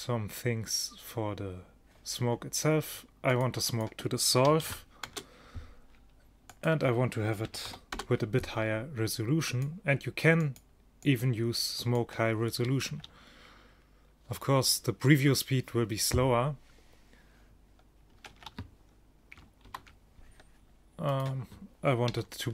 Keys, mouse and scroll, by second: 3.4-5.5 drag, 5.5 middle click, 6.6 click, 13.0 alt+a, 18.7 alt+a, 19.7 ctrl+shift+Down.